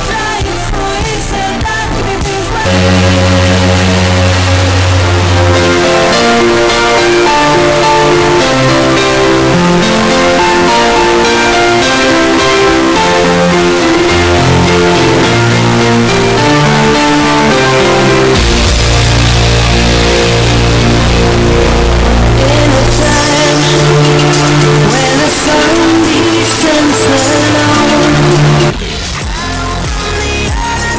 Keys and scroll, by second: 29.3 Page_Down.